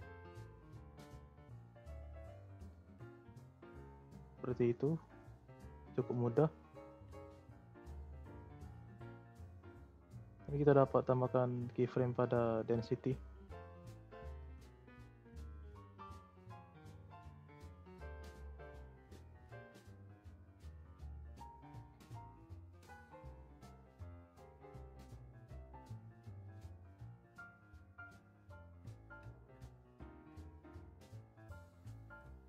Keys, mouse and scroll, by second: 2.6-3.0 scroll down 1, 3.0-3.5 scroll up 2, 3.5 z, 4.3-4.8 scroll down 2, 4.8-5.3 middle drag, 5.3 scroll down 1, 5.5 click, 5.8-6.5 scroll up 4, 5.9 middle drag, 7.3 click, 8.0-9.3 scroll up 7, 9.3-11.6 middle drag, 11.6-14.3 right drag, 14.3 z, 15.8 scroll up 1, 15.9 middle click, 16.4 z, 19.4-22.4 drag, 25.2-26.3 right drag, 26.3 scroll down 1, 26.4 middle click, 26.9-27.8 scroll up 4, 27.8-32.4 drag.